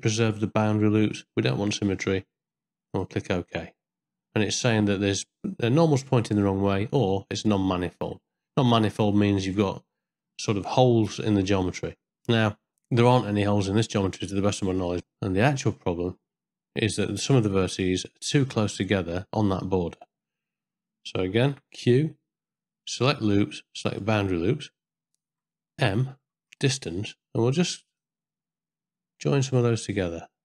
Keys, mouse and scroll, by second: 8.6 ctrl+middle click, 9.2 shift+middle click, 10.2-11.3 middle drag, 13.6 middle click, 15.0 middle click, 15.6 ctrl+middle click, 18.0 ctrl+middle click, 21.5 q, 25.9 m, 28.0-30.4 shift+drag.